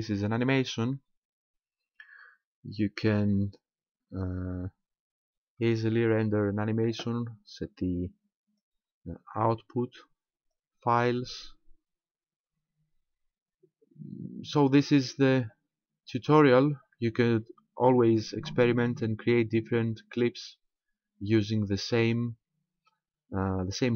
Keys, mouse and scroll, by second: 8.0 click, 10.5 click.